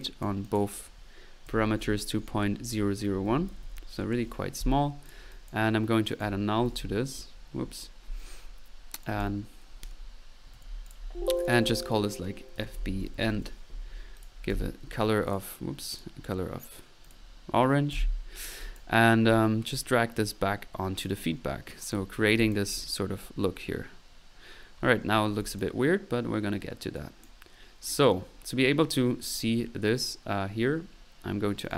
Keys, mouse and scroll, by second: 0.0-0.8 drag, 0.8 click, 6.1 right click, 6.2 click, 6.5-7.2 typing, 7.6 middle click, 9.0-9.5 drag, 10.5 typing, 10.9 alt+click, 11.4 alt+click, 14.2 middle click, 14.6 c, 15.3 middle click, 15.5 click, 17.0 click, 17.9 c, 18.3 middle click, 18.6 click, 19.7 click, 20.8 click, 21.8-22.4 middle drag, 22.4 click, 22.7 middle click, 25.4 click, 31.7 right click.